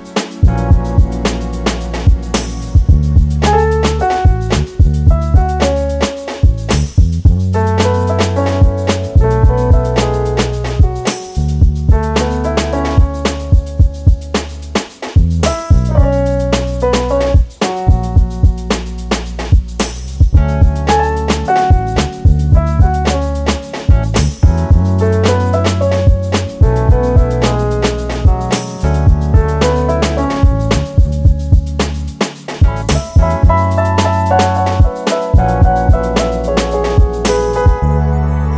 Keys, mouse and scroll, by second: 4.8 click, 5.7 g, 9.5 click, 9.7-12.0 middle drag, 11.3-11.7 scroll up 1, 11.7 Tab, 12.0 click, 12.7 e, 14.7 click, 14.8-18.7 middle drag, 16.2 scroll up 1, 16.8-17.4 scroll up 1, 17.4 ctrl+r, 19.1 click, 20.9 click, 22.8 shift+d, 24.2 click, 24.4-27.4 middle drag, 24.8-25.3 scroll up 1, 25.3 r, 27.4 click, 27.6 e, 29.0 click, 29.3-30.4 middle drag, 30.2 scroll down 2, 33.8 middle click, 35.2-35.8 scroll up 2, 35.3 middle click, 35.8 middle click, 36.3 ctrl+r, 37.0-38.5 middle drag.